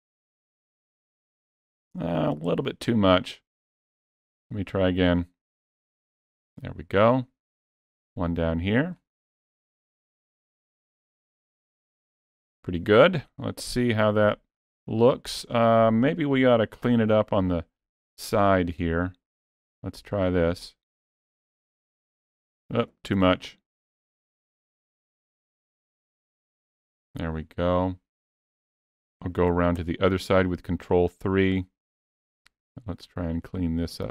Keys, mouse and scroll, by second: 2.4 ctrl+z, 4.1 click, 8.8 click, 12.4-12.8 scroll up 1, 12.8-13.5 scroll down 3, 13.2 middle click, 16.6 KP_3, 17.6-18.0 scroll up 2, 18.2 scroll down 1, 20.4 click, 23.1 ctrl+z, 24.6 click, 29.6 ctrl+KP_3, 33.2 click.